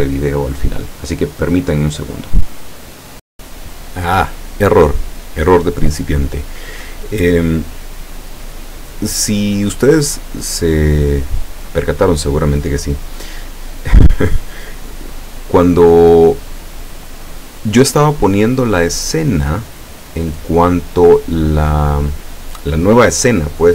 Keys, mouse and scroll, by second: 3.3 click, 12.0-12.8 middle drag, 14.0-14.6 scroll up 1, 15.2 middle click, 16.6-18.1 middle drag, 18.1 click, 18.7 scroll up 1, 19.8 scroll down 1.